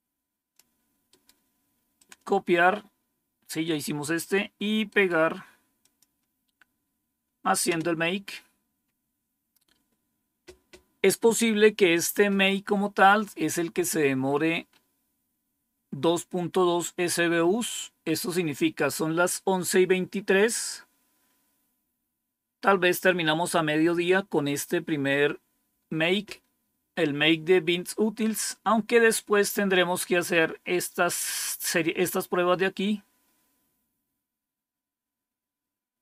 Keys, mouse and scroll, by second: 1.0 right click, 1.9 click, 2.5 scroll up 2, 4.8 right click, 5.7 click, 7.6 Return, 14.2 scroll up 2, 28.1 scroll down 3, 29.1 scroll down 2, 29.8-30.3 scroll down 4, 33.5 scroll down 2, 34.4-35.7 scroll down 1, 35.7-36.0 scroll up 1.